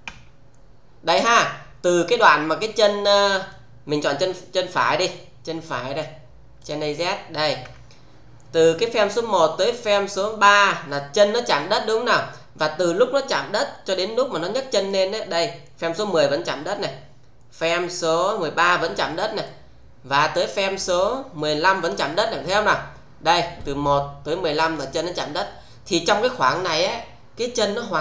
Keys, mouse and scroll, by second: 1.9-3.0 click, 4.2 click, 6.5 click, 7.6 f, 8.9-9.8 click, 11.2-12.8 click, 16.1-18.2 click, 19.4-20.9 click, 23.5 click.